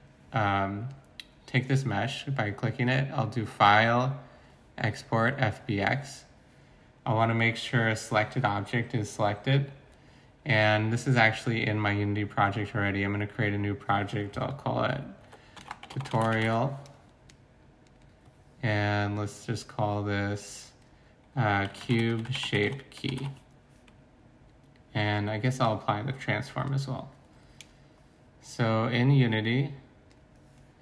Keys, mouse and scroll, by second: 15.5-16.4 typing, 21.7-23.2 typing.